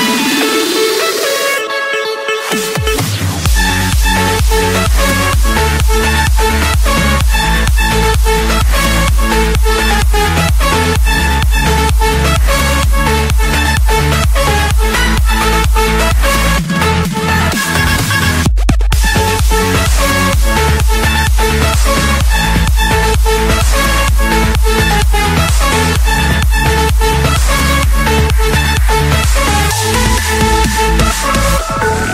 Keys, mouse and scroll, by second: 0.3 click, 1.0 m, 1.4 Return, 4.3 click, 5.8 click, 6.8 click, 7.2 l, 7.5 Return, 9.1-10.2 drag, 10.5 3, 10.7 3, 11.1 Return, 11.9 Escape, 15.3 click, 15.6 click, 16.5 m, 16.9 Return, 18.5 click, 19.5 click, 20.6 l, 20.9 Return, 22.6 click, 23.7-24.0 typing, 24.7 Return, 25.9 Escape, 26.6 click, 27.0 click, 28.0 typing, 28.3 Return, 29.8-30.9 drag, 31.3 drag, 31.5 Escape.